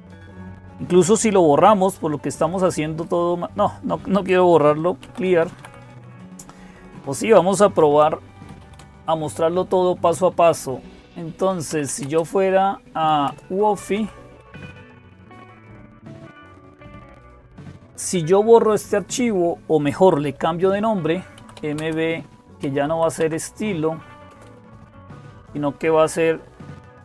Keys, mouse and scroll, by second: 0.0-27.0 typing, 15.1 Return.